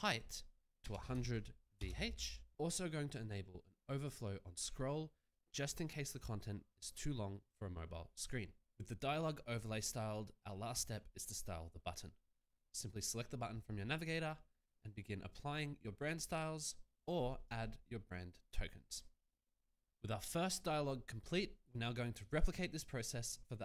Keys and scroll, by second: 0.9 0, 1.7 h.